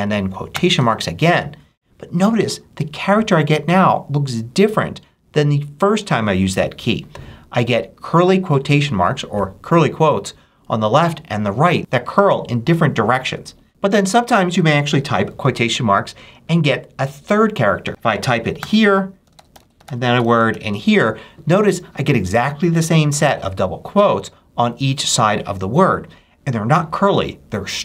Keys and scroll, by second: 0.4 shift+', 18.5-20.9 typing.